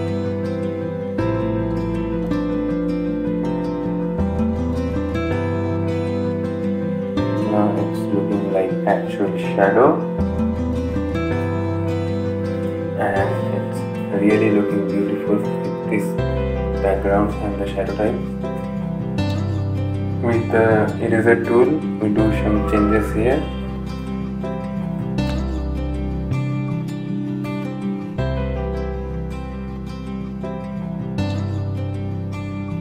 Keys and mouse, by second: 11.3 Down, 13.1 typing, 13.6-21.0 drag, 25.4 right click, 26.9-31.3 drag.